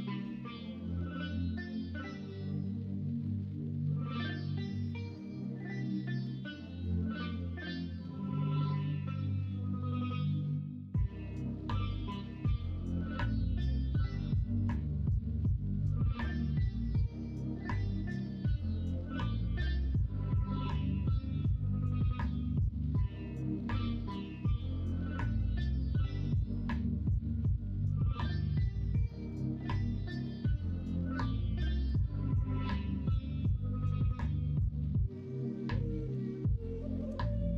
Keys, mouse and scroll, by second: 0.3 Tab, 0.8 Tab, 1.3 middle drag, 1.9-3.2 middle drag, 3.5 middle drag, 3.8 shift+middle drag, 4.5 middle drag, 5.0 shift+middle drag, 5.9 shift+middle drag, 6.5 middle drag, 7.0 shift+middle drag, 7.5-8.0 middle drag, 8.4 shift+middle drag, 8.9 middle drag, 9.8 KP_1, 10.1 KP_3, 11.5 shift+middle drag, 16.4-21.9 middle drag, 22.2-23.7 middle drag, 24.1 middle click, 24.8 middle drag, 26.6 middle drag, 27.4 shift+a, 28.8 middle click, 30.8-31.2 middle drag, 31.8 KP_1, 32.0 KP_3, 32.5 alt+z, 34.0 Tab, 35.1 r, 37.0 g.